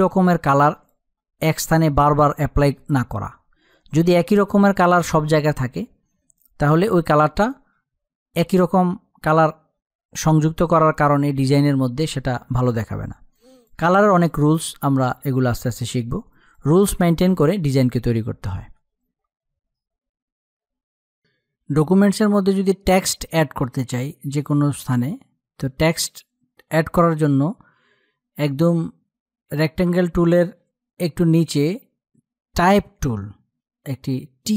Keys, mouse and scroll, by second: 16.2 click, 23.7 space, 24.0 click, 24.0 click, 24.3 space.